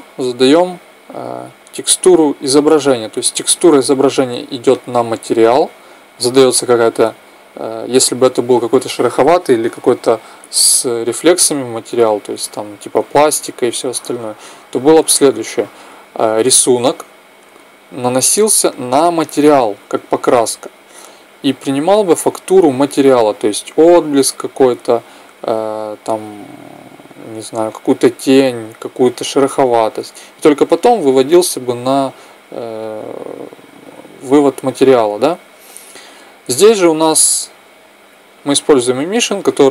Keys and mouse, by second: 35.9-39.7 drag.